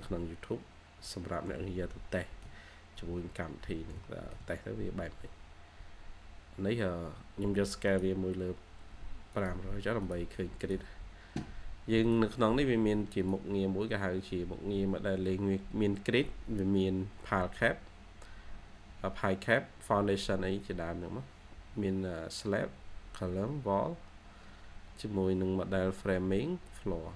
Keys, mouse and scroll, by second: 1.4 middle click, 3.9 shift+middle click, 4.6-5.6 scroll down 1.